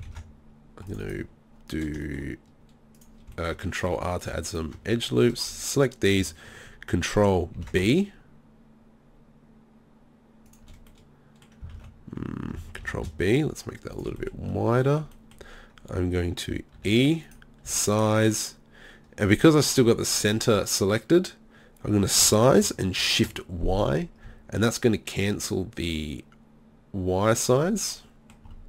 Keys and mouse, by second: 0.1 ctrl+r, 1.1-3.0 drag, 3.0 middle click, 3.2-7.6 drag, 4.1 right click, 7.6 ctrl+b, 10.6 click, 11.8 ctrl+z, 12.8 ctrl+b, 14.1 click, 16.8 e, 17.7 s, 19.1 click, 19.8-22.2 drag, 22.2 s, 27.5 click.